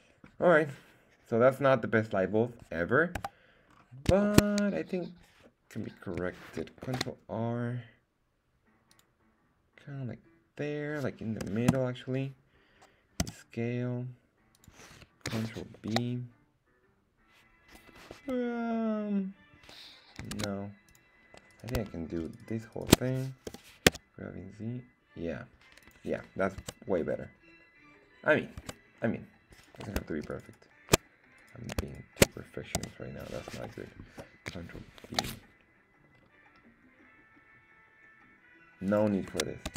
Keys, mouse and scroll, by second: 3.2 KP_1, 3.7-4.1 scroll up 2, 4.3 shift+middle click, 6.8 ctrl+r, 11.4 KP_0, 11.7 Return, 13.2 s, 14.5 click, 15.8 ctrl+b, 18.1 Escape, 20.3 ctrl+Tab, 21.5 right click, 22.3 alt+shift+right click, 22.8 alt+shift+right click, 23.5 g, 23.9 z, 25.8 click, 26.6 Tab, 26.9-28.6 scroll down 2, 28.6 Tab, 28.9 scroll up 1, 29.5 right click, 29.5 scroll up 1, 30.3 alt+shift+right click, 30.4 alt+shift+right click, 31.4 right click, 31.9 alt+shift+right click, 32.7 s, 33.5 Escape, 35.0 ctrl+b, 36.1-36.5 scroll down 2, 36.8 scroll down 2, 37.0-38.0 scroll up 2, 38.8 click.